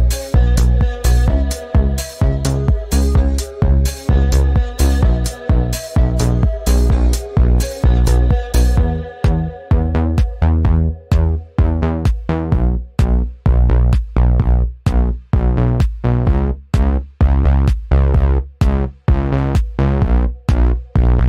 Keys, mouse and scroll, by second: 3.3 click, 3.4 space, 4.2 i, 4.8 click, 5.5 v, 5.8 click, 6.3-7.0 space, 8.1 space, 8.4-9.5 drag, 12.2 right click, 15.4 click, 16.7 right click, 20.7 click.